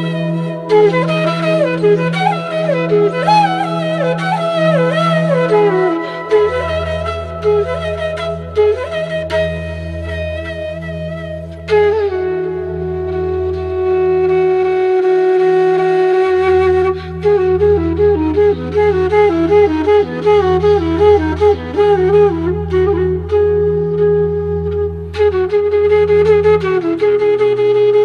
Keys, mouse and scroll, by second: 2.3-5.6 drag, 6.3 click, 7.1 alt+scroll up 1, 8.5 alt+scroll down 1, 9.2 alt+scroll down 1, 10.3 click, 14.5-21.6 drag, 22.8 click, 24.4 click, 25.7-28.0 drag.